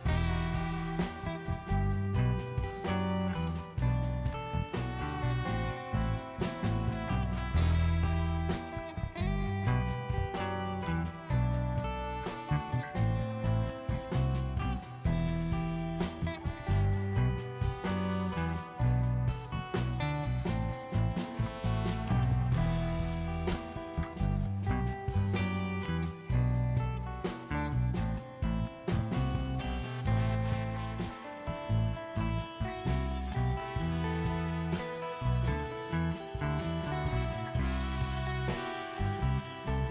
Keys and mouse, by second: 0.2 click, 1.0 ctrl+click, 6.5 alt+click, 8.8 Tab, 11.2 click, 30.1 click, 31.1 click, 32.4 click, 33.6 e, 34.0 click, 34.7-37.4 typing, 35.1 click, 35.7 click, 36.2 click, 36.8 click, 37.3 click, 39.0 click, 39.2 s, 39.6 g.